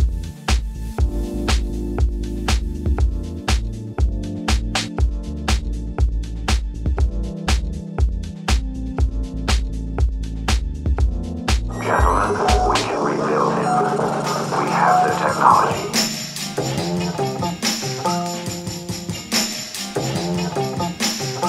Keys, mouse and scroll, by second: 0.1 click, 0.7 ctrl+click, 1.5-1.9 drag, 2.1-2.9 typing, 2.6 click, 3.9 click, 4.7 ctrl+click, 5.7 click, 6.2 Tab, 6.8 alt+a, 7.5 click, 9.0-9.7 drag, 9.8 Escape, 10.5 s, 10.5 z, 11.6 click, 12.7 click, 13.9 Tab, 14.3-14.6 drag, 15.0-15.3 drag, 15.7-16.5 typing, 16.0 click, 16.3 click, 17.7 ctrl+click, 19.9 ctrl+click.